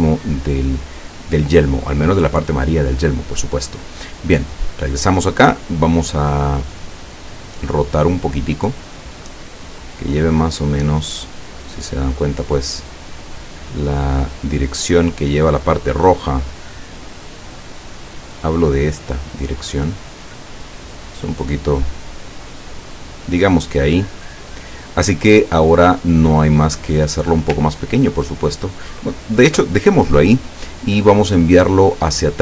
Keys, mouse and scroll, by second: 4.5 click, 5.2 click, 6.7-8.9 drag, 9.1-11.1 drag, 11.5 click, 12.8-15.7 drag, 16.3-18.4 drag, 19.7-21.1 drag, 21.9 click, 23.6-26.5 drag, 27.2 click.